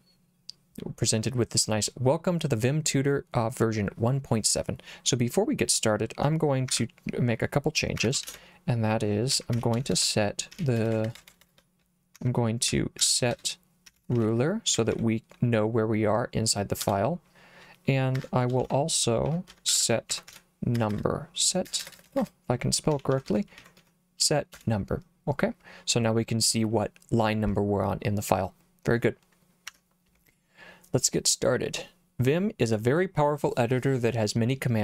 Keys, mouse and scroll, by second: 6.7 Escape, 7.9 Escape, 8.2-15.4 typing, 16.8 Return, 18.2 Escape, 18.6-24.3 typing, 24.5 Return.